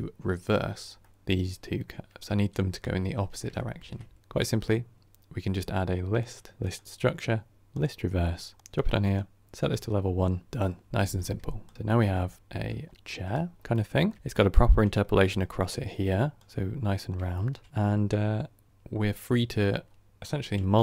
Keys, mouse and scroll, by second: 9.6-11.7 drag, 11.7 middle drag, 11.9-12.3 scroll down 3, 12.3 shift+middle click, 12.8 scroll down 2, 12.9-13.4 middle drag, 13.4 scroll down 2, 13.6-16.3 middle drag, 16.3 click, 17.2-20.8 shift+middle drag.